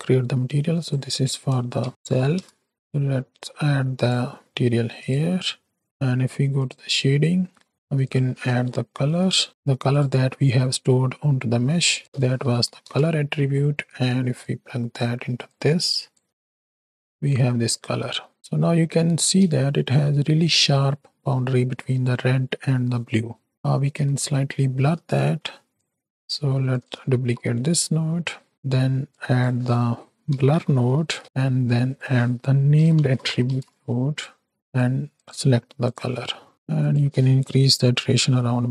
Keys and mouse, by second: 2.0 l, 2.7-3.8 drag, 4.0-5.8 drag, 6.5-7.7 drag, 7.7 middle click, 7.7 shift+a, 10.1 middle click, 11.8-12.9 drag, 14.3 click, 15.5 click, 16.2 z, 17.2 middle click, 17.9 middle click, 18.4 middle click, 19.5 space, 20.6 space, 23.8 z, 24.6 middle drag, 25.2 middle click, 25.7 click, 26.7 click, 27.1 shift+d, 29.0-31.2 drag, 31.8-34.7 drag, 35.1 click, 36.8-38.7 drag.